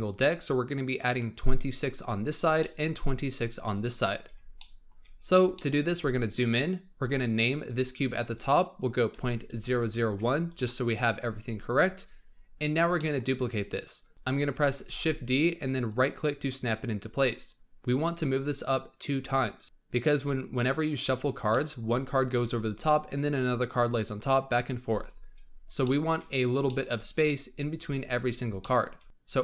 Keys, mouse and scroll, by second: 1.0-2.1 scroll down 2, 2.1-2.5 scroll down 1, 2.5-4.1 shift+middle drag, 4.1-4.5 scroll up 2, 4.5 shift+middle click, 5.1-5.5 scroll up 3, 5.5-5.8 shift+middle drag, 5.8-7.5 scroll up 4, 7.5 click, 7.7-9.7 drag, 9.7 KP_0, 12.2-12.9 scroll up 4, 12.9-13.3 shift+middle drag, 13.3-14.1 scroll up 4, 14.1 click, 14.8 shift+d, 19.6-20.3 drag, 20.3-21.4 scroll down 11, 21.4-22.6 shift+middle drag, 25.5 scroll up 4, 25.7-27.0 shift+middle drag, 27.0-27.9 scroll up 3, 27.9-28.5 scroll up 6, 28.5 shift+middle click.